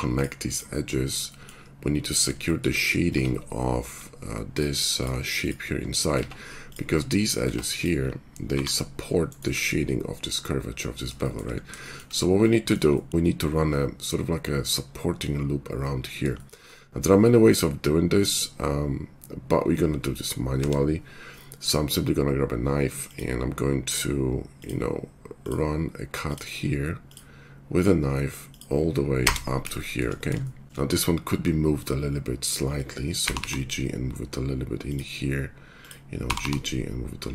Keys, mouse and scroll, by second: 3.1 Tab, 4.6 click, 5.4 click, 7.4 Tab, 8.5 g, 11.1-29.7 shift+middle drag, 20.5 k, 30.6 shift+Tab, 33.1 g.